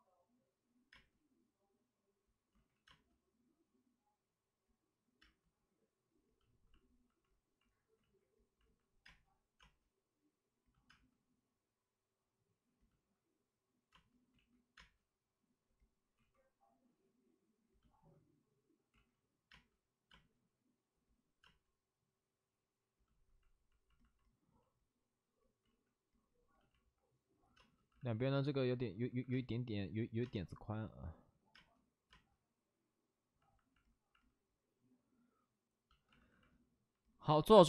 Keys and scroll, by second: 0.9 space, 2.5 ctrl+z, 2.8 space, 5.2 space, 7.9 ctrl+z, 9.0 space, 9.5 space, 10.8 space, 13.8 space, 14.3 ctrl+z, 14.7 space, 16.1 ctrl+z, 18.9 ctrl+z, 19.4 space, 20.5 space, 21.4 space, 24.8 space, 25.6 ctrl+z, 27.5 space, 27.9 alt+s, 29.1 alt+s, 29.3 space, 34.7 space, 36.1 alt+s.